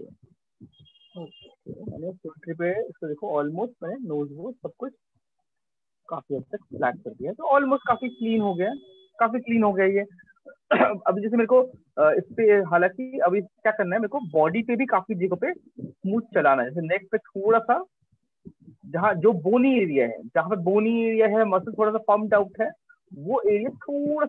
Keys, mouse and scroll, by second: 0.4 shift+click, 1.8 click, 3.3 click, 4.5 shift+click, 5.5 click, 6.7 alt+click, 7.9 click, 8.7 alt+click, 9.9 right click, 10.5 alt+click, 11.5 right click, 13.7 alt+click, 14.5 ], 14.9 ], 15.1 ], 15.3 ], 16.7 click, 17.5 click, 18.3 alt+click, 18.4 click, 18.6 alt+click, 18.9 click, 19.3 click, 20.1 click, 20.8 click, 22.4 click, 22.6 click, 23.9 click.